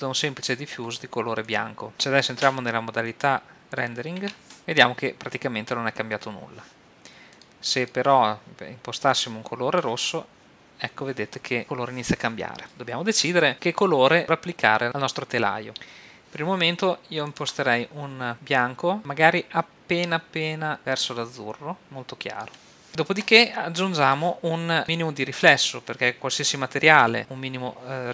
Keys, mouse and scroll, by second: 1.6 click, 4.3 shift+a, 9.1 click, 17.3-18.6 drag, 23.8-25.6 drag, 26.4 middle click, 27.0 click, 27.6 middle click.